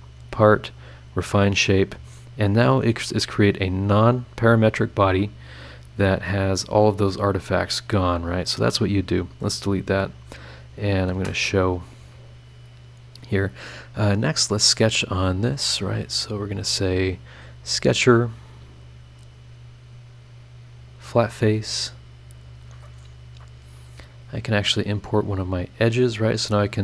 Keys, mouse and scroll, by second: 0.2 click, 1.1 click, 3.1 click, 4.5 click, 5.6-5.9 scroll down 2, 6.4-7.1 scroll up 2, 7.3 scroll down 2, 8.3 right click, 9.2 click, 10.5 click, 10.8 click, 11.1 space, 11.8 click, 12.3-13.1 scroll down 2, 13.2-13.8 scroll up 2, 14.4 click, 16.8 click, 17.7 click, 18.0 middle click, 19.1 click, 19.4-20.7 middle drag, 20.7 click, 21.5-21.8 scroll up 1, 22.0 scroll down 2, 24.2 click, 25.3 click.